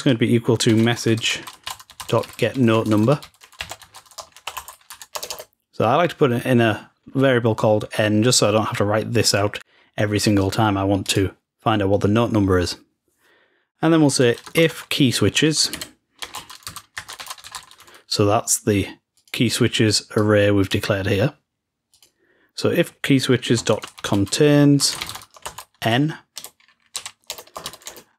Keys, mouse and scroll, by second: 8.5 click, 11.0 click, 11.5 click, 19.1-21.3 drag, 21.8 click.